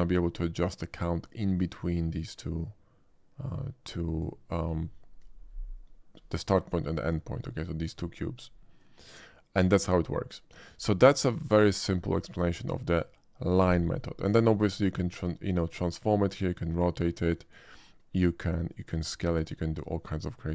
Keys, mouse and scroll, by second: 0.0-4.2 drag, 16.4-17.5 drag, 18.7-20.5 drag.